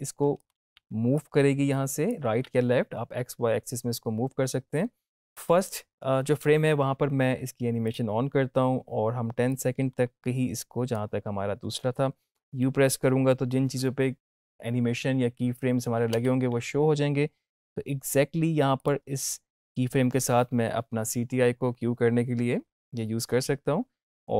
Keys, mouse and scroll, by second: 0.5 ctrl+z, 1.1-2.0 drag, 7.8-11.0 drag, 16.0 u, 18.7 click.